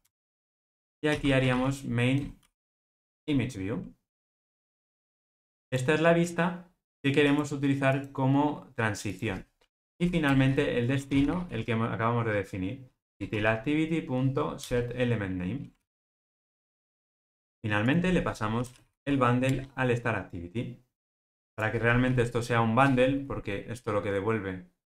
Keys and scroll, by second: 3.0 Return, 13.1 Return, 15.7 alt+super+l, 19.4 ctrl+alt+o.